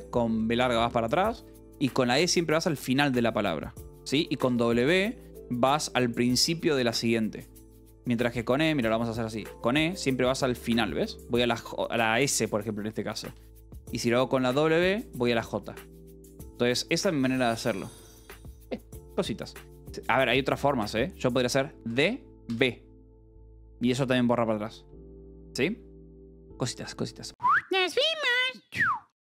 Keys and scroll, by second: 1.4 e, 3.8 b, 4.4 w, 7.6 h, 8.7 b, 9.2 e, 13.0 b, 14.7 w, 16.2 b, 17.1 Escape, 20.3 e, 21.8 d, 22.4 b, 24.8 Escape, 25.3 l.